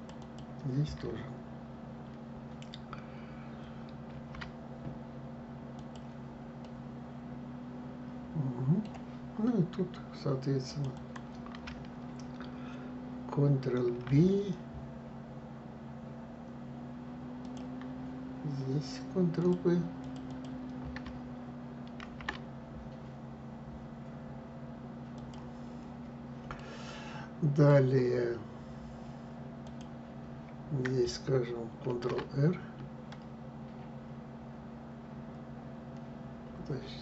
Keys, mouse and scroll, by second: 3.8 ctrl+b, 6.3-9.3 middle drag, 10.3 click, 10.6 click, 13.6 ctrl+b, 19.1 click, 19.7 click, 19.9 click, 21.7 ctrl+b, 25.5 scroll down 2, 26.2-29.2 middle drag, 29.3 click, 31.6 ctrl+r.